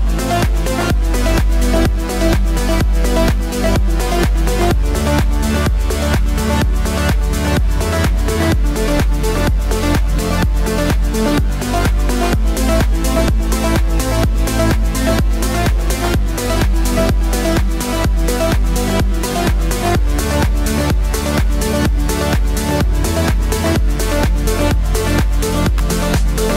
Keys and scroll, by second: 25.8 v.